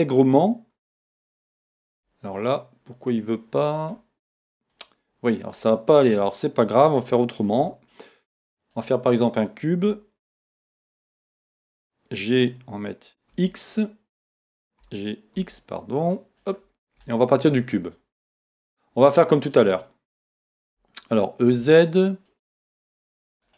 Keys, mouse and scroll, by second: 7.5 shift+a, 9.9 g, 16.5 click, 17.0-19.4 shift+middle drag, 19.4 click, 20.7 e, 22.4 click, 22.7-23.5 middle drag, 23.4 right click.